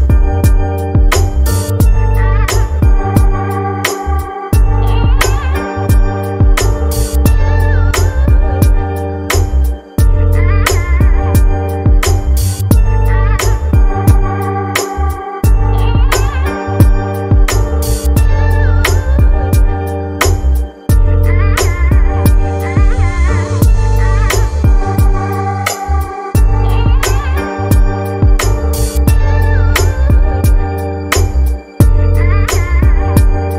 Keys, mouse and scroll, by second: 2.2 click, 3.4 click, 5.0-8.4 drag, 10.2 click, 10.7-11.4 scroll up 2, 17.5 click, 21.9-25.0 drag, 30.5-31.2 drag, 31.2-32.4 scroll down 10.